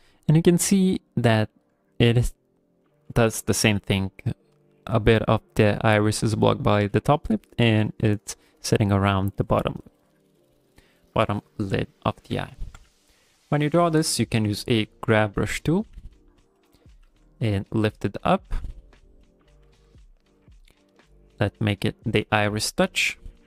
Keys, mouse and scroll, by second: 10.1 scroll down 2, 11.0 right click, 11.9 ctrl+middle click, 12.3 middle click, 12.7 g, 12.9 f, 13.2 middle click, 13.7 f, 14.2 click, 14.4 f, 14.9 click, 15.2 click, 15.5 click, 15.7 middle click, 15.9 f, 16.3 click, 16.8 middle click, 17.0 f, 17.3 middle click, 17.8 click, 18.1 middle click, 18.4 f, 18.7 click, 19.3 middle click, 19.6 f, 20.0 click, 20.4 middle click, 21.1 click, 21.4 click, 21.9 shift+middle click, 22.2 middle click, 23.3 shift+middle click.